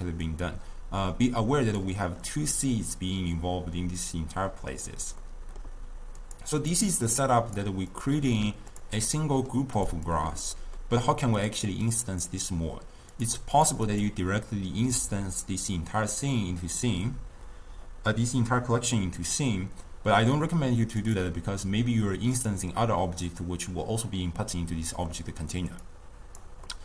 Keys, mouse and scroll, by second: 0.3-2.3 drag, 2.3-6.3 middle drag, 6.3 click, 6.6 click, 7.2 click, 8.0 click, 8.7 click, 9.1-9.8 middle drag, 9.8 drag, 10.1 click, 10.8-11.4 middle drag, 11.4 drag, 11.9 click, 13.1 click, 13.6 click, 13.9-17.1 right drag, 21.0 click, 22.4 click, 25.1 middle click, 25.9 click, 26.7-26.8 middle drag.